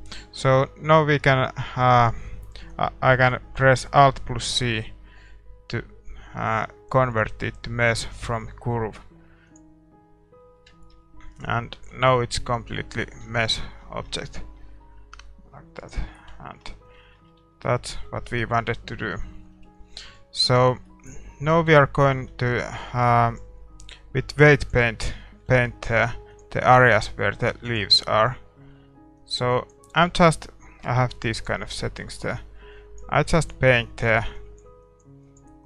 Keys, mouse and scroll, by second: 0.4 a, 0.9 a, 1.3-9.6 right drag, 1.9 middle click, 10.0-18.3 middle drag, 10.2 a, 11.3-13.1 right drag, 11.9 Tab, 15.8-17.6 right drag, 16.3 Tab, 17.6 Tab, 18.8 KP_1, 19.1-20.4 middle drag, 19.5 KP_5, 20.4 scroll down 1, 20.5 scroll up 1, 20.7-22.2 middle drag, 21.5 a, 21.7 Tab, 24.7 click, 25.2-26.9 middle drag, 25.9 f, 26.7-35.6 drag.